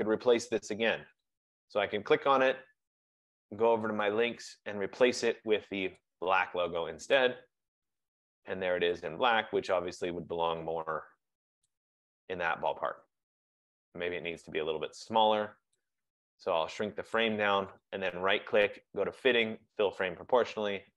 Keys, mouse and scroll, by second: 4.1 click, 11.8 click, 17.2 shift+click, 17.9 shift+right click, 20.2 click.